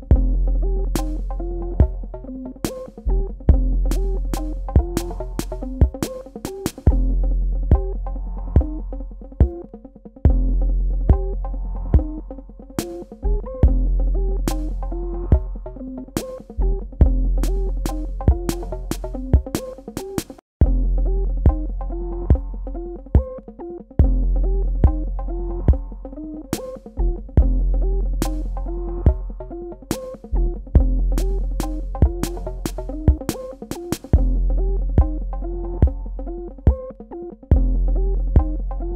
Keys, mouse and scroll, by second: 1.6 click, 1.9 right click, 3.2 click, 6.8 KP_Subtract, 8.0 click, 9.5 space, 17.6 super+KP_Subtract, 18.1 space, 18.5 click, 18.7 space, 19.4 click, 20.5 Tab, 20.8 space, 21.0 click, 21.3 space, 22.5 click, 31.7 click, 34.8 click, 35.2 space, 35.4 click, 35.7 space, 35.8 click, 36.3 space, 37.0 click, 38.4 super+KP_Add.